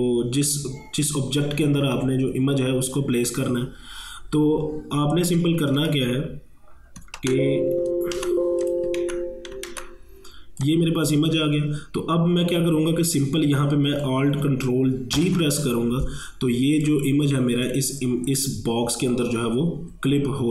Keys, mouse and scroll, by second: 5.5 super+=, 7.2 ctrl+z, 8.2 ctrl+z, 8.7 click, 9.0 ctrl+z, 9.7 ctrl+z, 10.7-13.5 drag, 14.1-15.2 drag, 15.2 ctrl+alt+g, 16.9-20.0 drag.